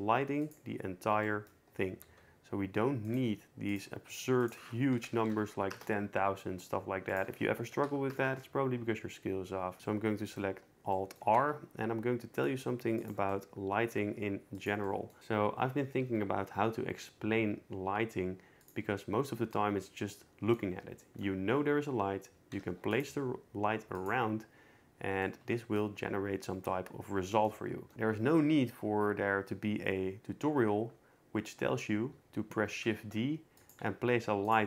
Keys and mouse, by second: 2.1 s, 3.3 g, 4.6-5.7 drag, 5.3 0, 7.1-8.1 drag, 9.8 alt+r, 11.4 r, 12.5 g, 13.3 middle drag, 14.1 g, 16.2 g, 19.5 middle click, 22.5 shift+d, 23.1 r, 25.2 click, 32.9 shift+d, 34.0 r, 34.4-34.6 drag.